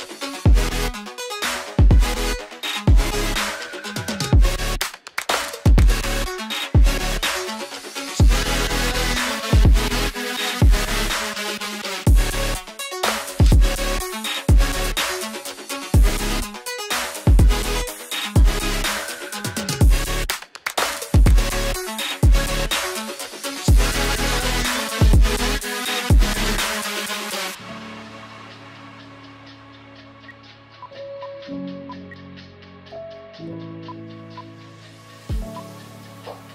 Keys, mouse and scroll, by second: 3.4 space, 4.2 double click, 8.3 F2, 17.9-18.2 scroll down 1, 18.7 F2, 26.7-29.5 scroll down 1, 30.1 space, 31.0 shift+click, 31.9 ctrl+z, 33.9 shift+click.